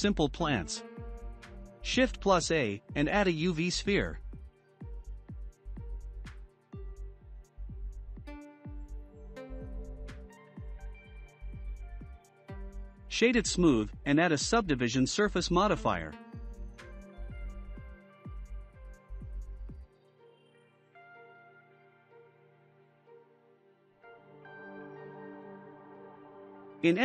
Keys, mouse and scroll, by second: 2.1 shift+a, 7.9 click, 8.9-9.5 middle drag, 9.5-9.9 scroll up 2, 9.9-11.1 shift+middle drag, 11.1 click, 12.1-13.5 right drag, 13.5-16.5 shift+middle drag, 16.9 click, 18.0-21.1 drag, 21.6 scroll up 1, 22.4 Tab, 25.6 2, 25.9 click.